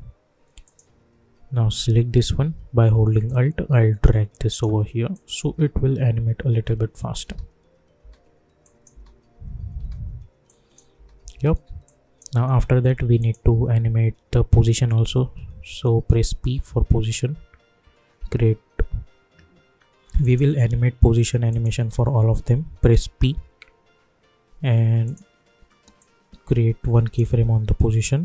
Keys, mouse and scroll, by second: 0.6-3.2 drag, 3.2-5.1 alt+drag, 5.4 space, 6.9 click, 7.2 space, 8.6 click, 8.9 space, 10.4 click, 10.9 space, 11.8-13.2 drag, 16.2 p, 20.2 click, 21.5 shift+click, 23.1 p, 25.0-28.2 drag.